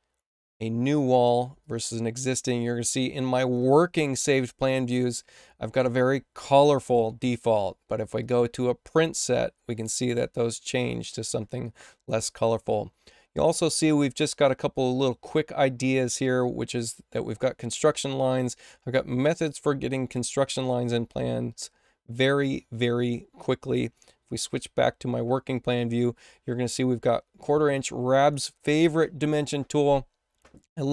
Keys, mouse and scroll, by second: 1.5 click, 2.8 click, 8.1 click, 9.1 click, 23.7 click, 24.4 click, 28.1 click.